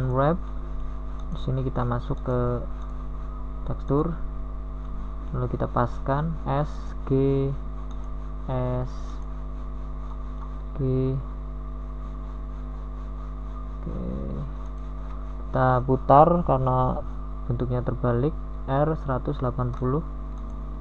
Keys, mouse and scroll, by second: 4.8 u, 9.7 s, 12.0 g, 13.1 s.